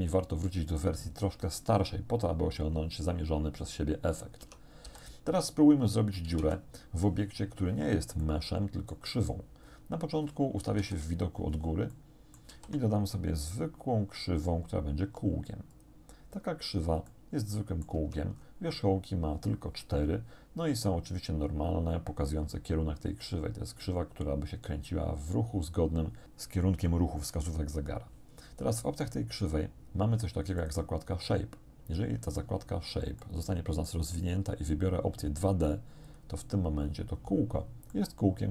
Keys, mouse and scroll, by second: 4.5 Tab, 4.9 x, 5.1 click, 6.4 1, 8.3 shift+click, 10.8 shift+7, 11.9 shift+click, 12.5 shift+a, 15.7 click, 17.1 click, 18.0 Tab, 18.1 middle click, 18.4 scroll up 1, 18.7-24.7 middle drag, 30.6 click, 33.3 shift+click, 36.1 middle click, 37.9-38.5 drag.